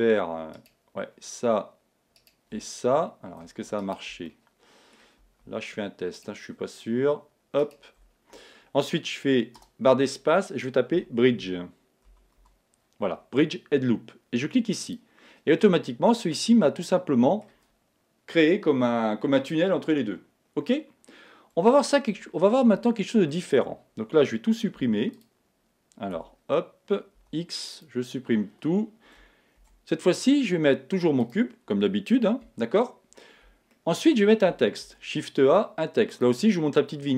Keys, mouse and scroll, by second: 3.7-5.5 right drag, 4.3-6.2 middle drag, 9.2 right click, 9.6 space, 15.6-19.4 middle drag, 26.3 Tab, 27.2 x, 29.8 shift+a, 32.4 KP_1, 33.8-36.1 middle drag, 34.8 shift+a.